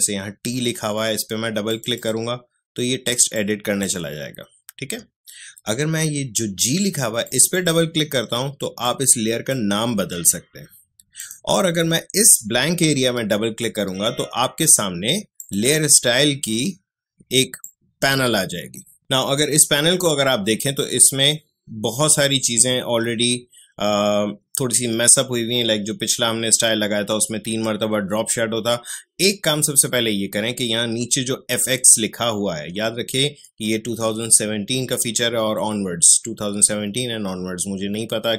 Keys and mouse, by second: 1.7-4.8 drag, 4.8 Escape, 7.2-11.1 drag, 15.3-19.0 drag.